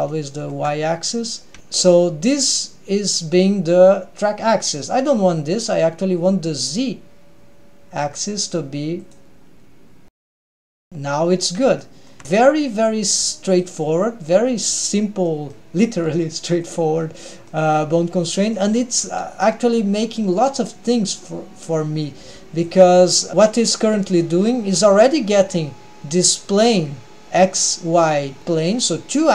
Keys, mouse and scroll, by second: 0.0-0.8 shift+middle drag, 1.0-1.9 scroll down 3, 1.5 shift+middle click, 9.1 click, 10.5 g, 11.8-12.2 shift+middle drag, 12.2 click, 12.2 g, 13.1 g, 13.9-14.5 middle drag, 14.5 g, 15.3 middle click, 16.1 g, 17.0 scroll down 1, 17.3-17.7 middle drag, 17.9 g, 18.5-18.9 middle drag, 19.1 g, 19.9 g, 21.3 middle click, 22.2 g, 23.0-24.2 scroll up 3, 23.3 middle click, 23.3 g, 24.2-24.6 middle drag, 25.0-25.4 middle drag, 25.5 scroll up 1, 26.0-26.5 middle drag.